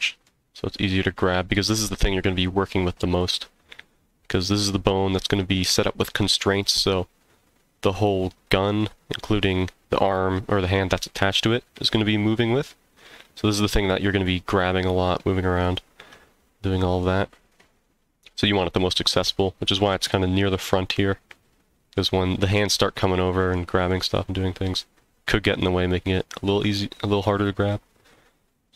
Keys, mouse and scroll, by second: 0.9-1.4 scroll down 1.